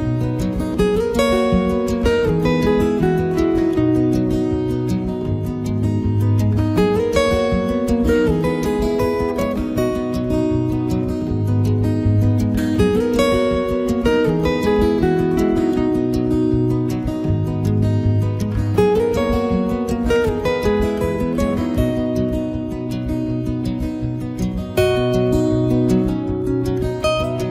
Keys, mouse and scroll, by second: 0.1 right click, 0.2 click, 0.6 click, 0.8 click, 0.8 middle click, 1.1 ctrl+right click, 1.4 right click, 1.6 middle click, 1.9 right click, 2.0 right click, 2.2 click, 3.2 middle click, 3.6 right click, 3.8 click, 4.4 middle click, 4.7 right click, 5.0 click, 5.3 click, 5.7 right click, 6.2 ctrl+right click, 6.3 click, 6.8 click, 7.2 click, 7.2 middle click, 7.6 right click, 7.8 click, 9.6 click, 9.9 click, 9.9 middle click, 10.6 middle click, 11.2 middle click, 11.2 ctrl+right click, 11.4 shift+right click, 11.5 right click, 11.9 click, 12.3 f, 12.3 click, 12.4 click, 13.1 click, 13.4 click, 14.1 click, 14.2 shift+f, 14.4 click, 15.8 click, 15.9 ctrl+right click, 16.1 shift+right click, 16.3 right click, 16.4 ctrl+right click, 16.5 shift+right click, 16.7 click, 17.1 click, 17.3 click, 17.5 f, 17.7 click, 18.5 click, 19.0 ctrl+right click, 19.1 right click, 19.2 click, 19.7 right click, 19.8 ctrl+right click, 20.0 shift+right click, 20.2 click, 22.1 middle click, 22.7 middle click, 22.9 ctrl+right click, 23.1 shift+right click, 23.2 right click, 23.4 click, 24.1 middle click, 24.2 f, 24.4 click, 25.2 click, 25.5 middle click, 26.0 ctrl+right click, 26.1 right click, 26.2 f, 26.3 click, 27.0 click, 27.2 middle click, 27.4 middle click.